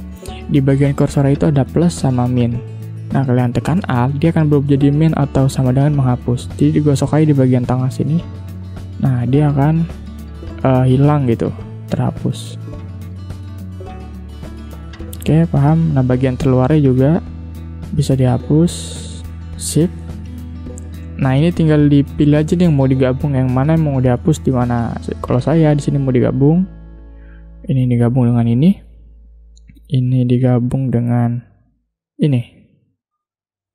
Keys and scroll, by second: 11.2 v, 13.0 shift+m.